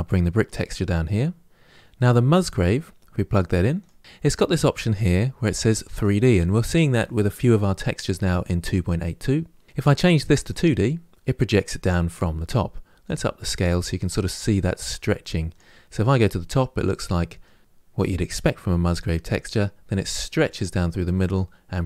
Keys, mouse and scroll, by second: 10.4-15.9 drag, 15.9-20.3 middle drag, 20.3-20.6 scroll up 1, 20.9-21.8 middle drag.